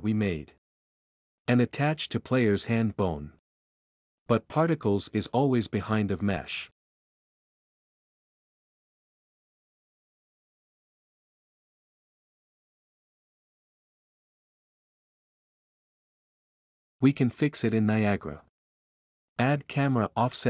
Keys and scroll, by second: 9.3-10.3 typing, 16.1-17.0 typing, 20.1-20.4 typing.